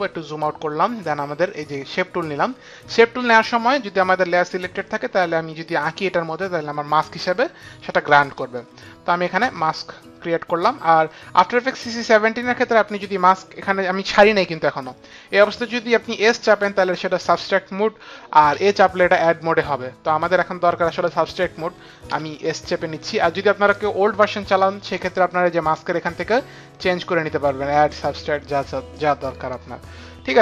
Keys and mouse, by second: 1.9 click, 8.6 click, 16.3 s, 18.5 a, 22.1 s, 26.1 click, 29.0 click.